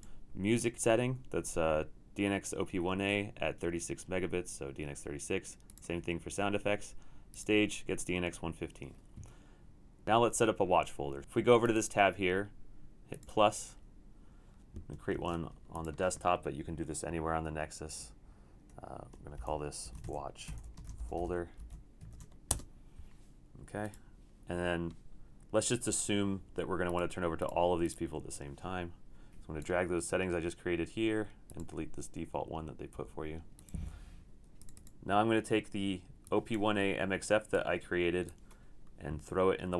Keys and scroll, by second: 15.2 shift+super+d, 19.4 shift+super+n, 19.7-22.5 typing, 25.3-26.0 typing, 33.0 Delete.